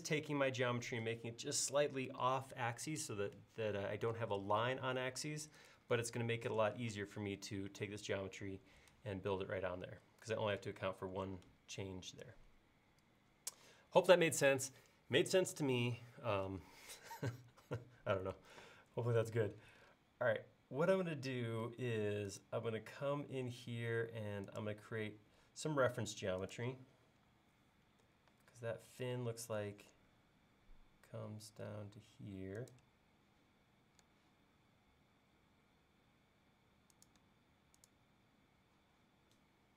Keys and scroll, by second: 7.0 space, 13.7 l, 27.3 Up.